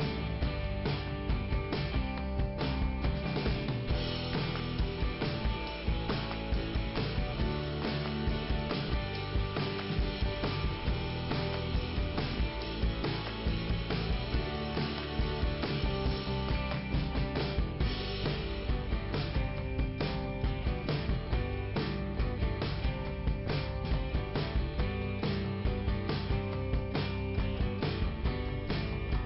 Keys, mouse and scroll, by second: 1.1 click, 1.9 click, 3.8 click, 4.0 click, 12.6 scroll up 2, 14.5 click, 15.9 click, 17.8 click, 19.7 click, 23.0 click, 24.2 scroll down 1, 26.2 click, 26.9-27.4 scroll down 1, 27.5 scroll down 1, 28.9 click.